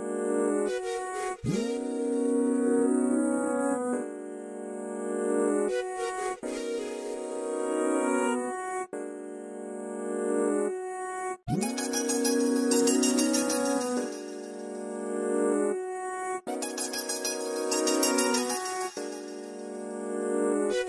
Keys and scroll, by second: 5.0 Delete, 6.5 m, 8.1 q, 9.8-12.9 typing, 18.8 Right, 19.0 typing.